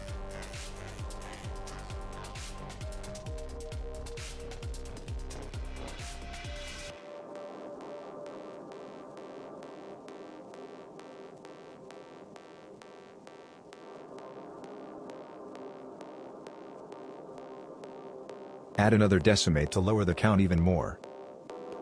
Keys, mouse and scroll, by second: 2.3 middle click, 2.9 click, 6.3 click, 6.3 middle click, 8.8 middle click, 9.5 scroll up 3, 11.6 click, 12.0 click, 12.6 click, 13.3 click, 17.6 click, 18.3 click.